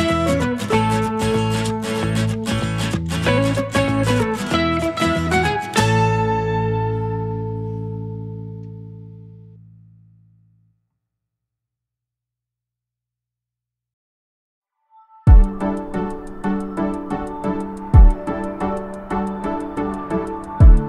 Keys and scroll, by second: 3.4 Escape, 3.6 a, 6.4 space, 6.7 Escape, 9.7 space, 15.7-17.2 typing, 18.0 Escape, 18.7 space.